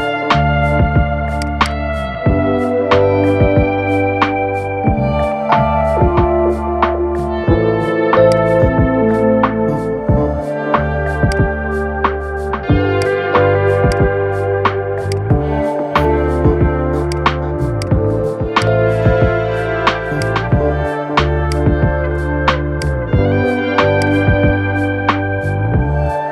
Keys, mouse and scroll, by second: 1.3-4.3 drag, 8.0-11.0 drag, 18.3 click, 19.9 click, 21.2 drag, 23.8-26.3 drag.